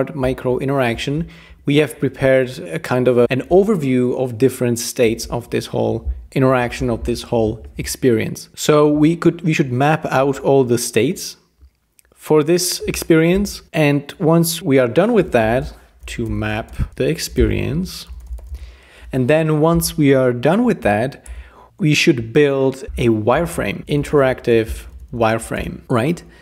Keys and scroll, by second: 6.4 Right, 15.2-19.1 typing, 21.3 Return, 23.1-26.4 typing.